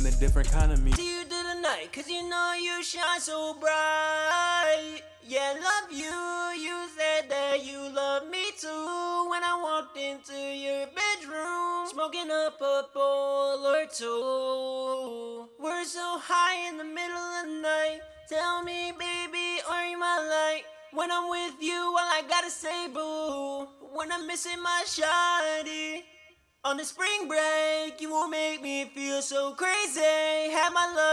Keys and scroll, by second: 18.2-19.4 typing, 24.2-25.4 typing.